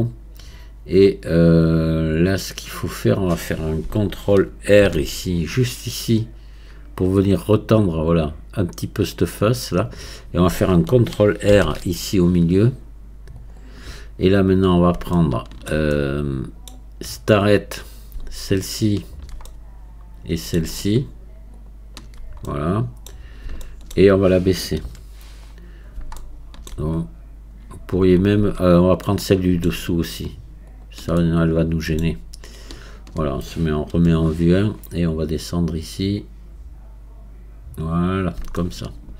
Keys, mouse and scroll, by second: 0.4-0.9 scroll up 1, 4.9 ctrl+r, 11.5 ctrl+r, 14.5 scroll up 2, 15.1-17.3 shift+middle drag, 17.3 click, 17.9 scroll up 2, 19.1 shift+click, 19.5-21.6 middle drag, 21.6 shift+click, 22.5 middle click, 23.2 scroll down 3, 23.7-24.9 shift+middle drag, 24.9 KP_1, 25.7 scroll up 2, 26.2 shift+middle click, 27.0-28.8 scroll up 1, 28.8 scroll up 3, 29.1-30.7 middle drag, 30.7 shift+click, 31.2-32.8 middle drag, 32.8-38.2 shift+drag, 38.2 scroll down 2, 38.6 shift+middle click.